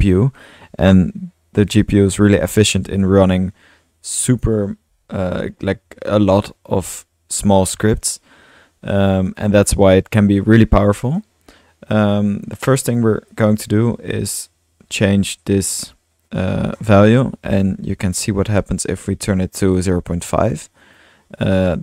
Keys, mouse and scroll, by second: 0.4-2.6 drag, 9.3 click, 9.7-11.1 drag, 13.0 middle click, 13.3-14.5 drag, 15.6-16.8 drag, 17.2-18.8 typing, 20.3 drag, 20.6-21.1 drag, 21.4-21.7 drag.